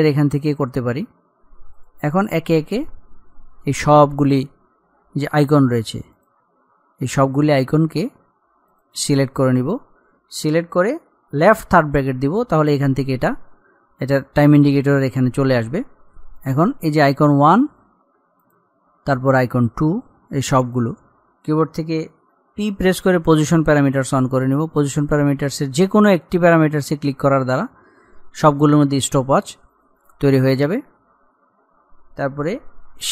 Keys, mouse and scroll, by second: 1.9 click, 5.5-6.3 scroll down 1, 6.3 click, 8.8 click, 11.9 [, 16.3 click, 23.0 p, 27.0 click.